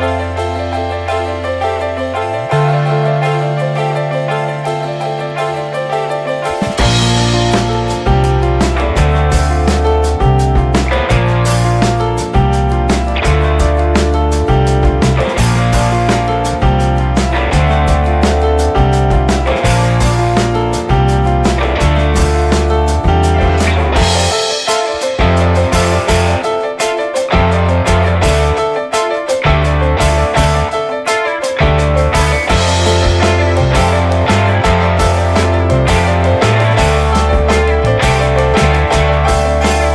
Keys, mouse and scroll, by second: 0.8 scroll up 2, 1.0 ctrl+s, 1.2 click, 1.6 click, 1.9-2.3 middle drag, 2.3 ctrl+s, 2.9 ctrl+1, 3.4 ctrl+2, 3.8 ctrl+3, 4.2 middle click, 4.4 scroll up 1, 4.6-5.9 shift+middle drag, 5.9 click, 6.3-8.8 middle drag, 8.8-9.1 scroll up 2, 9.1 shift+middle click, 9.6 middle click, 10.1-10.7 scroll down 7, 10.7-13.2 middle drag, 13.2-14.4 drag, 14.4 middle click, 14.8 ctrl+s, 15.0 middle click, 15.4 ctrl+s, 16.4-18.6 drag, 18.6-20.8 shift+middle drag, 20.8 click, 21.4-23.0 middle drag, 23.0-23.5 drag, 23.8-25.2 drag, 25.2-26.0 shift+middle drag, 26.0-27.4 scroll up 1, 27.4-29.7 middle drag, 29.7 click, 30.3-31.2 middle drag, 32.0 ctrl+s, 32.3-33.4 alt+middle drag, 33.4-36.0 drag, 37.6-38.2 scroll down 2, 38.5 ctrl+s.